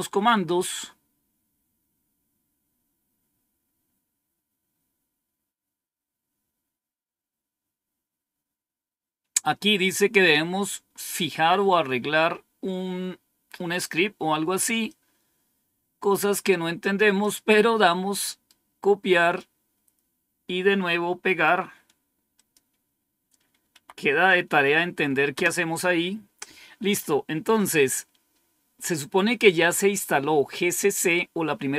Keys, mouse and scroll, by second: 5.9-6.5 scroll up 1, 6.5 scroll up 1, 13.4-14.7 scroll down 1, 14.7-17.8 drag, 18.2 right click, 19.1 click, 21.1 right click, 21.7 right click, 22.3 click, 23.6 Tab, 25.2 Return.